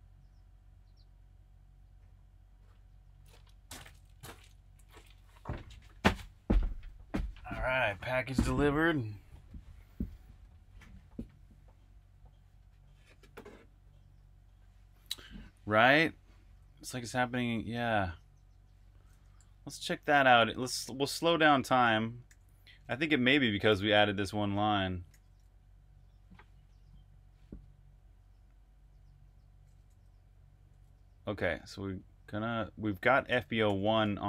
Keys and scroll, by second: 19.6 super+`, 22.1-26.1 typing, 24.9 super+r, 30.5 i, 32.9-34.2 typing.